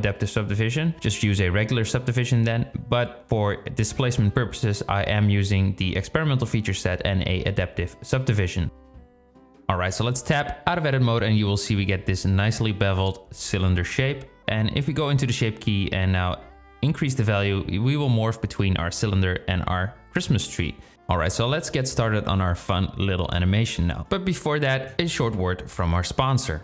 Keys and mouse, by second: 9.4 Tab, 10.7 click, 14.7-18.8 drag, 20.2 click, 21.5 KP_0, 23.2 click.